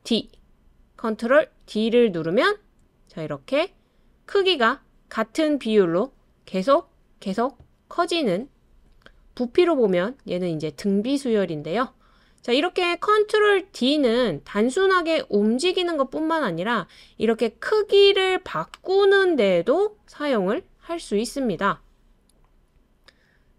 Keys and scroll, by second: 0.0 super+d, 1.6 super+d, 3.2 super+d, 7.0 super+d.